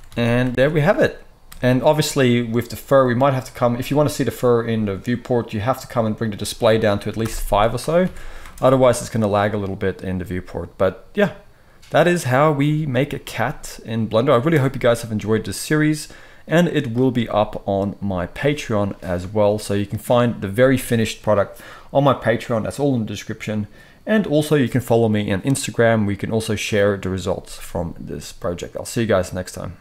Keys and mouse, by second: 0.0 alt+a, 0.4 space, 1.4-1.7 middle drag, 1.4 space, 1.7 click, 1.9-2.3 middle drag, 2.9 click, 3.0-6.2 middle drag, 6.2-29.8 drag, 8.0 alt+a, 8.3 space.